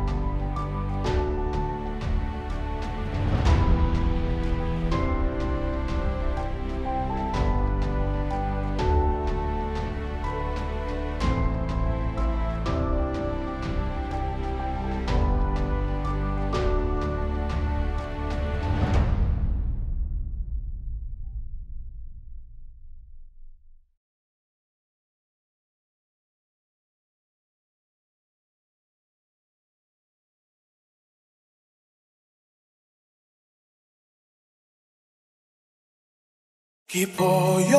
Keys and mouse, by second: 1.6 middle click, 21.2 middle click, 32.2 space, 32.9 space, 33.7 space, 35.2 middle click, 36.5 middle click.